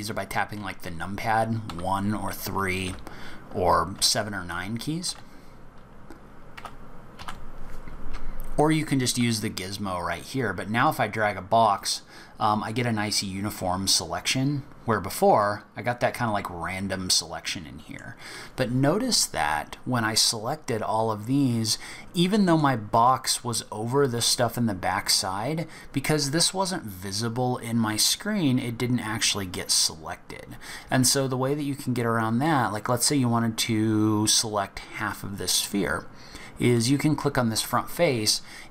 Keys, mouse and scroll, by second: 0.5 KP_1, 1.6 KP_3, 2.8 KP_9, 4.0 KP_7, 5.0 KP_8, 6.5 KP_7, 7.2 KP_1, 9.0 click, 10.8 click, 13.0 scroll up 5, 14.3-15.4 scroll down 4, 15.4 middle click, 18.0-18.4 scroll down 1, 22.3 middle click, 22.6-25.2 scroll up 5, 32.8 scroll down 4, 36.7 click.